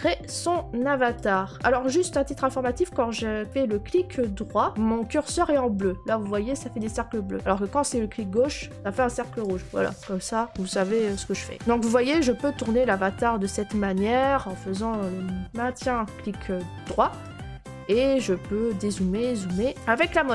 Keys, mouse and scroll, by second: 1.1 right click, 1.1 scroll, 3.1 right click, 4.7 right click, 5.7 right click, 6.7 right click, 9.4 click, 17.2-19.7 right click, 17.4-19.9 scroll.